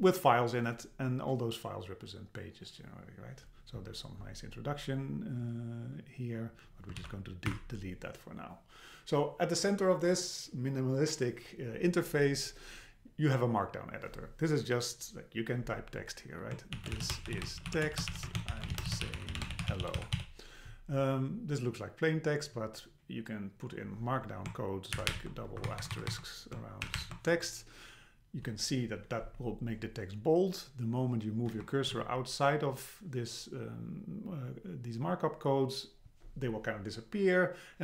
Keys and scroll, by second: 7.0 super+a, 7.5 BackSpace, 25.6 Right, 31.5 Right.